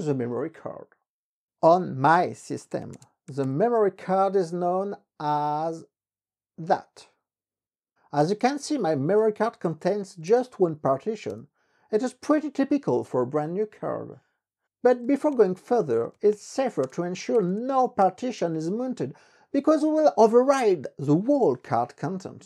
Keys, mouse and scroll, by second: 0.9-2.9 typing, 6.3 ctrl+c, 8.7-10.7 typing, 11.4 Return, 14.8-19.6 typing.